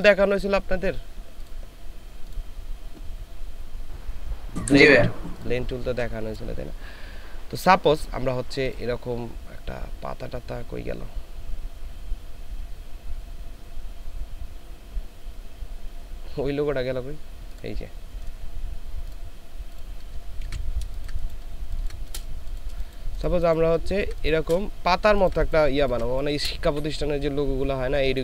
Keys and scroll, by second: 0.4 ctrl+space, 20.5 ctrl+v, 21.0 ctrl+space, 21.5 ctrl+space, 23.8 ctrl+space, 25.1 ctrl+space.